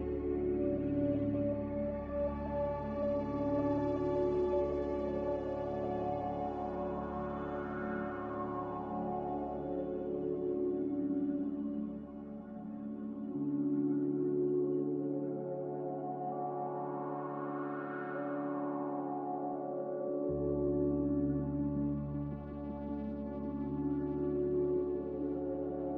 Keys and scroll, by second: 0.2-1.1 typing, 2.4-4.0 typing, 12.9-14.1 typing, 17.0 typing, 17.2 Return, 18.5 Delete, 25.4 z.